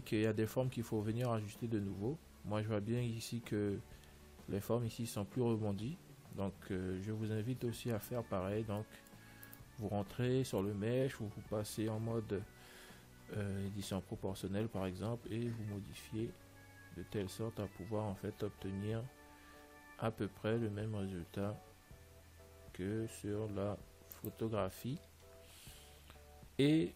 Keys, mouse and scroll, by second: 7.1 Tab, 7.2-9.8 middle drag, 9.8-11.7 right drag, 12.3 o, 13.7 g, 26.5-26.9 middle drag.